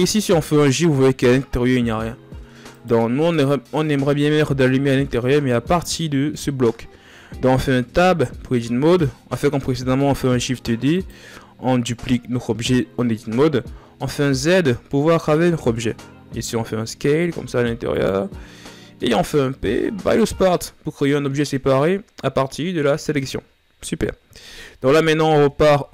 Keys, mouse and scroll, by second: 0.0 g, 3.0-3.6 scroll down 3, 3.6-4.2 scroll up 4, 4.2-4.7 shift+scroll down 5, 5.5-7.4 scroll up 1, 7.4 Tab, 9.5 shift+d, 13.6 z, 24.9 Tab.